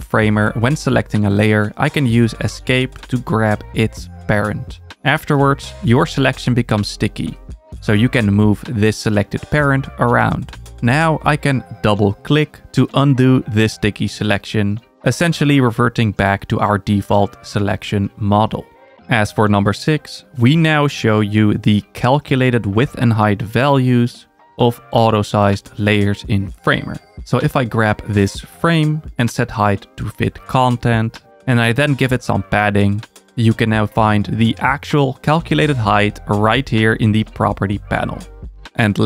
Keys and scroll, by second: 18.0 super+z.